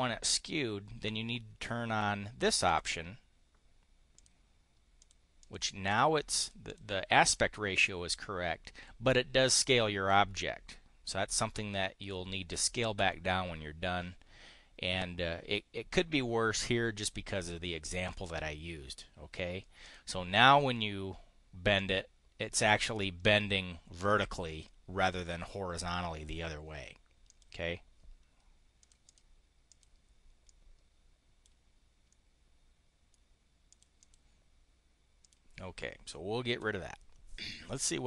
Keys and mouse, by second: 2.6 click, 4.1 click, 4.9 click, 5.4 click, 5.8 click, 6.3 click, 6.7 click, 7.2 click, 19.8 click, 21.6 click, 27.3 click, 28.7 click, 29.6 click, 30.4-31.4 drag, 33.3 click, 33.7 click, 35.2 click, 36.5 Delete.